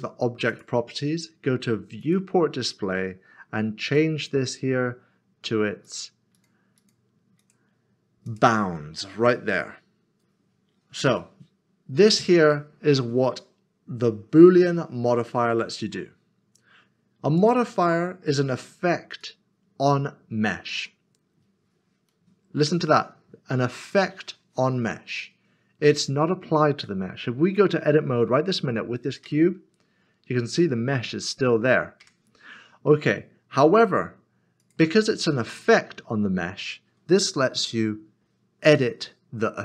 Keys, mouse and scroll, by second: 0.5 click, 2.6 scroll down 1, 3.9 click, 6.8 double click, 8.7 click, 12.5 click, 12.7 middle click, 17.4 click, 29.2 click, 30.4 Tab, 32.0 Tab, 34.6 click.